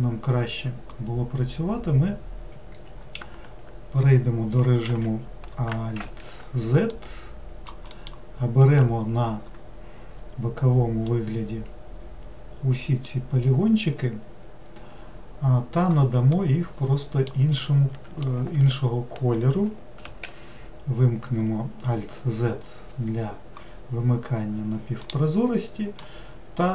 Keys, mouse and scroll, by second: 4.8 alt+x, 6.0 alt+z, 6.9 alt+middle click, 8.0 alt+middle click, 11.1 click, 16.3-18.5 middle drag, 18.5 alt+x, 20.0 alt+z, 25.0-26.7 middle drag.